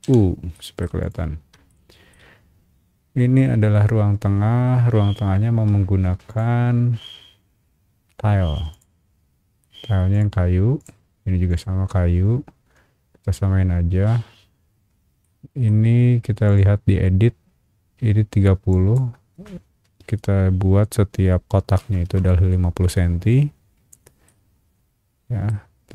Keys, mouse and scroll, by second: 0.0 u, 0.5 middle click, 1.0 click, 1.7 shift+middle click, 6.3 click, 6.8 scroll down 1, 7.6 scroll up 1, 8.0 scroll down 1, 8.7 click, 9.3 scroll down 1, 10.1 click, 10.8 click, 11.5 click, 12.6 scroll up 2, 14.8-15.2 scroll up 2, 15.2 middle click, 16.4 click, 18.7 click, 21.8 KP_5, 22.0 KP_0, 24.2-25.4 middle drag, 25.7 scroll down 1.